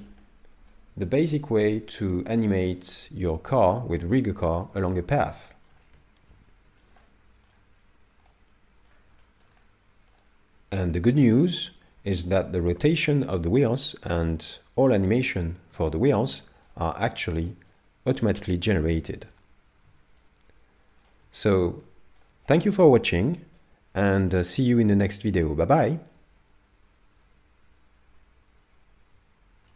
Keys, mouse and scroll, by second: 0.2 middle click, 1.0 shift+middle click, 4.3 shift+middle click, 4.9-5.3 scroll down 2, 5.4 shift+middle click, 6.3 n, 7.0 middle click, 7.8-8.1 scroll up 2, 8.3 middle click, 9.2 shift+middle click, 9.6 middle click, 14.5 middle click, 15.8 shift+middle click, 16.3 middle click, 16.9 shift+middle click, 17.5 middle click, 19.3 scroll down 5, 20.2 shift+click, 21.8 middle click, 22.5 shift+middle click.